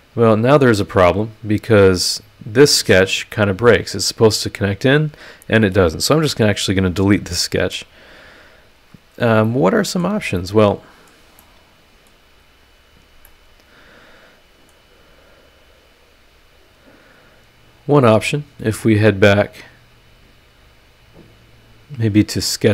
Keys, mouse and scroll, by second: 0.1 scroll down 1, 0.3 middle click, 0.7 scroll up 1, 1.0 middle click, 1.7 click, 2.0-5.7 middle drag, 6.2 Delete, 7.4 scroll down 1, 7.7-9.4 drag, 7.8-9.4 right drag, 9.4 middle click, 9.4 click, 9.5 right click, 10.4 middle click, 10.4 click, 10.4 right click, 11.4 middle click, 11.5 click, 11.5 right click, 12.4-13.0 scroll down 1, 13.2 click, 13.3-14.9 right drag, 14.9 middle click, 14.9 scroll down 1, 15.1 middle click, 15.3-15.6 scroll up 1, 15.6 middle click, 16.0 scroll up 1, 18.8 click, 22.1 click.